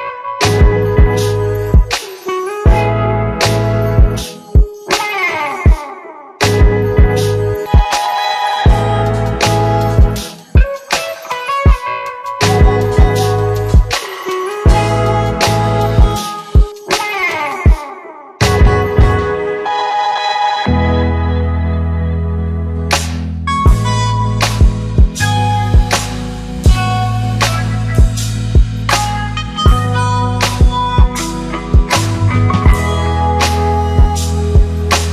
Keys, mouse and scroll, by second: 2.9 Return, 5.1 z, 6.0 click, 13.4 click, 20.6 alt+Num_Lock, 21.0 alt+click, 22.4-24.0 typing, 29.7 click, 32.3 space.